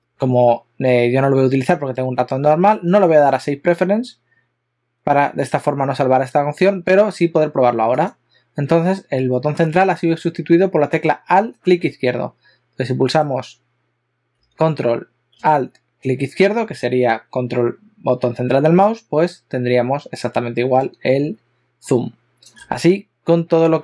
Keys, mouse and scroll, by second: 19.0 ctrl+middle click.